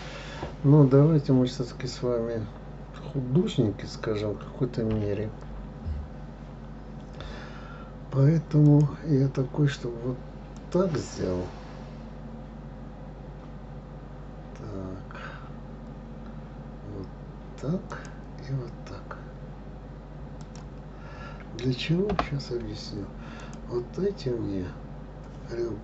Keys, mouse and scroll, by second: 5.3 k, 23.8 click.